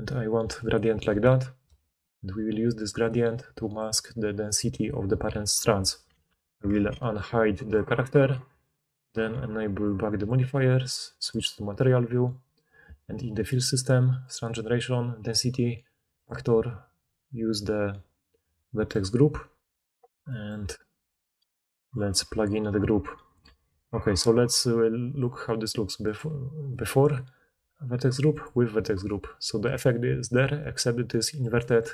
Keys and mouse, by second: 6.2 alt+h, 7.7-9.7 middle drag, 9.7-11.9 drag, 11.9-12.4 middle drag, 12.4 click, 15.5-16.1 middle drag, 16.1-26.1 drag, 23.5 alt+a, 26.1-28.3 middle drag, 28.3 click, 29.0-31.9 middle drag.